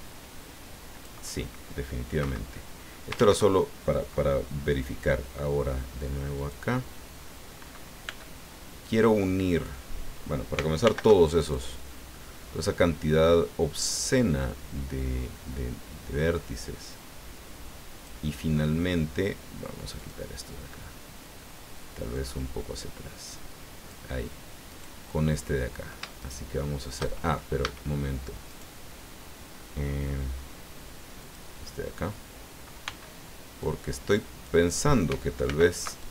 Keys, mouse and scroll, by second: 2.2 Escape, 3.1 ctrl+z, 6.3 click, 8.0 b, 8.8-9.8 drag, 10.8 alt+m, 11.4 alt+click, 14.1-18.2 drag, 19.9 click, 22.1-24.1 drag, 24.7 right click, 26.2 shift+right click, 27.6 a, 28.5 right click, 31.2 click, 32.8 b, 33.6-34.6 drag, 35.4 alt+m, 36.0 alt+click.